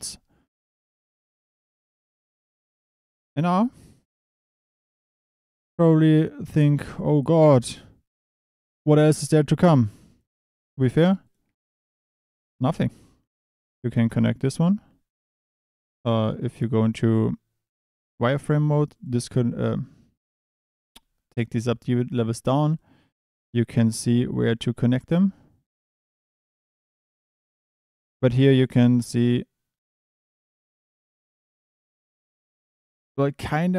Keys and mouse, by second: 6.1 Tab, 6.6 1, 10.1 click, 10.7 shift+d, 11.2 click, 11.4 e, 11.9 e, 12.2 click, 12.9 g, 16.6 click, 18.9 click, 22.1 click, 24.2 g, 25.0 g.